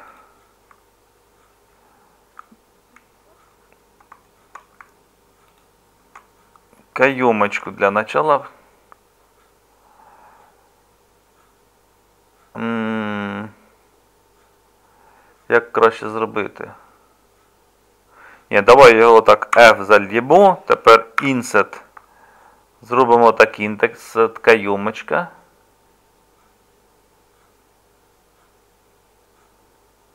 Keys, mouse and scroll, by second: 19.6 f.